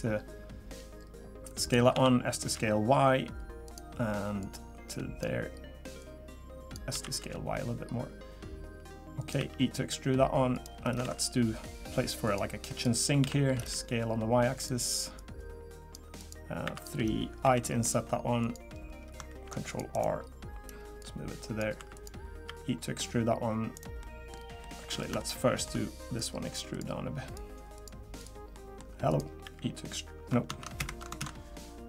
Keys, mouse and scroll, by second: 1.9 s, 4.4 click, 6.0 click, 6.9 s, 9.4 e, 11.0 ctrl+r, 13.2 s, 15.1 click, 16.2 click, 16.6 3, 16.7 click, 17.4 i, 19.3 ctrl+r, 21.0 click, 21.8 3, 21.9 click, 22.4 e, 24.0 middle click, 24.3 scroll up 3, 24.6 middle click, 25.2 shift+middle click, 26.2 click, 26.7 click, 27.2 click, 27.7 click, 28.2 click, 28.5 middle click, 29.1 click, 29.4 e, 31.2 ctrl+z.